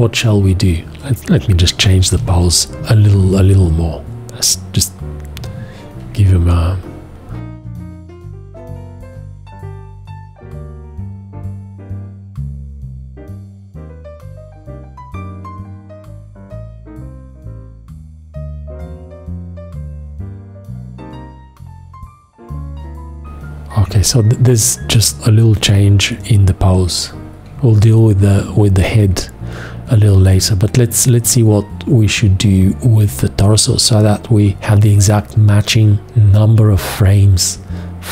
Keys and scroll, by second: 2.1 g, 2.7 F1, 9.2 h.